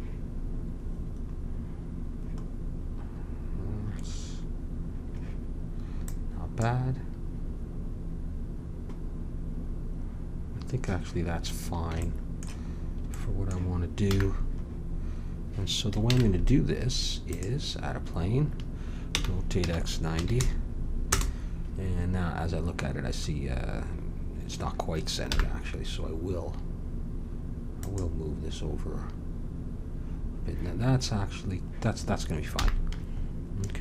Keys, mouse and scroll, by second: 0.0-2.4 drag, 3.6-6.0 middle drag, 6.0-12.0 drag, 12.2 middle click, 14.0 n, 16.0 shift+a, 19.0 r, 25.3 n, 27.8-32.6 drag, 32.6 n, 33.7 Tab.